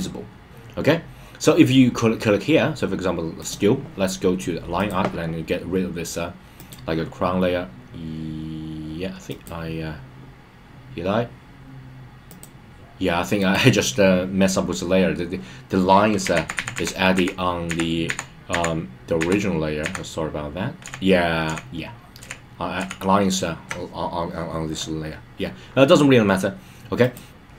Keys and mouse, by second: 3.3 click, 4.7 click, 6.5 click, 9.2 click, 12.3 click, 13.3 click, 16.3 super+z, 16.5 super+z, 17.5 super+z, 19.1 super+z, 20.1 super+z, 20.8 super+z, 23.6 super+z, 27.0 click.